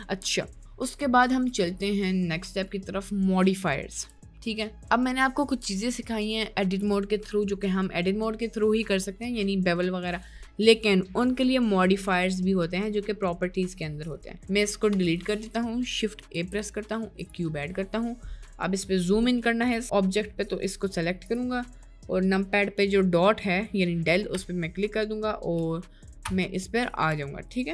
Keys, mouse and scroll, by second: 4.2 Tab, 15.0 Delete, 16.5 shift+a, 17.8-19.4 middle drag, 24.3 KP_Decimal, 25.5 KP_Enter, 26.2 KP_Enter, 27.0 middle click, 27.1-27.7 KP_Enter.